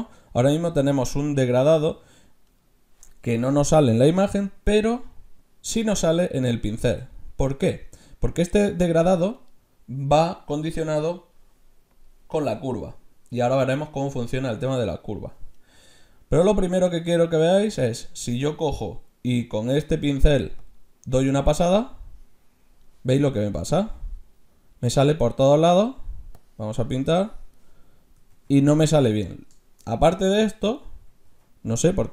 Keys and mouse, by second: 4.6 f, 11.0-13.9 drag, 12.3 middle click, 13.7 middle click, 13.7 right click, 14.1 middle click, 16.9 f, 20.6-22.4 drag, 23.8 ctrl+z, 25.6 ctrl+z, 26.4-28.1 drag, 28.3 ctrl+z, 29.9 middle click, 31.3 z, 31.8 middle click.